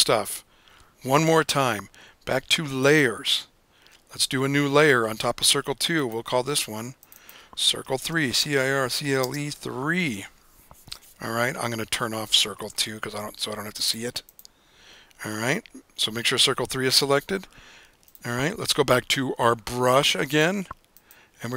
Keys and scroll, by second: 7.9-10.1 typing.